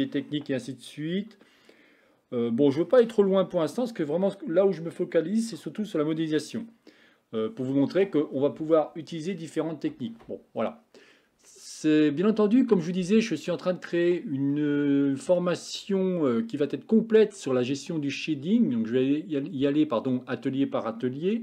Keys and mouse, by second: 14.6 middle click.